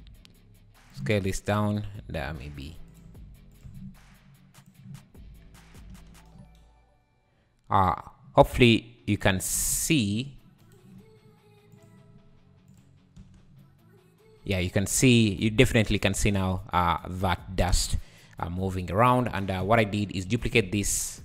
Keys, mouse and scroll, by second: 1.2 click, 1.2 scroll up 3, 1.5 Tab, 2.3 s, 3.1 g, 3.7 Tab, 4.6 click, 5.1-5.8 scroll up 2, 5.2 `, 5.9 space, 7.7 `, 8.4-8.8 scroll up 3, 9.1 scroll down 4, 9.3 Escape, 10.7-11.7 shift+right drag, 11.7-12.8 drag, 13.2 space, 14.4 `, 15.4 `, 17.7 space, 18.8 drag, 19.1 scroll down 6, 19.3 Tab, 19.6 `, 20.0-20.3 scroll up 2, 20.3 shift+d.